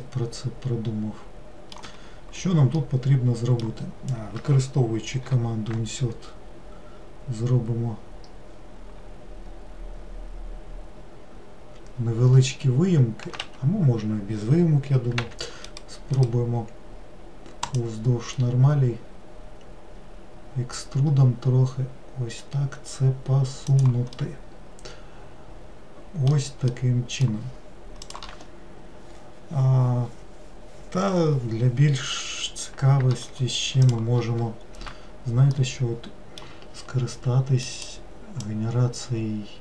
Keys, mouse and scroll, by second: 0.1-5.3 middle drag, 15.3 e, 16.2-19.2 right drag, 24.2-29.9 middle drag, 35.7-37.7 middle drag, 37.7-39.6 drag.